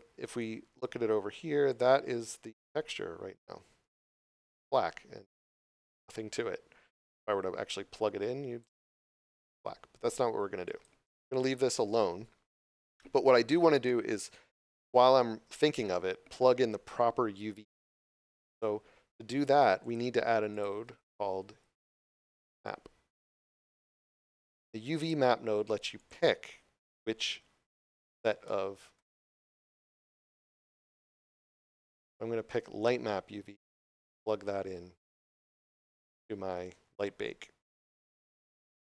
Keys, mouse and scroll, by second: 2.3 scroll down 1, 3.3 scroll up 1, 7.9 click, 11.4 right click, 19.8 click, 24.9 click, 29.1 scroll up 1, 29.7 shift+middle click, 30.2 scroll up 1, 31.1 click, 35.6 scroll down 1, 38.2 scroll down 1.